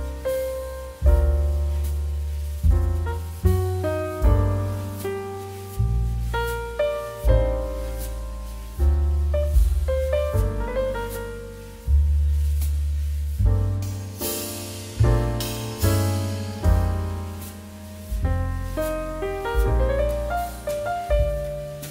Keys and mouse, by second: 1.4 click, 10.3 Return, 10.8 shift+middle click, 11.0 click, 11.3 Tab, 11.5 click, 12.7 click, 17.4 shift+middle click, 20.6 middle click, 20.9 shift+middle click, 21.2 click, 21.3 middle click, 21.6 shift+middle click.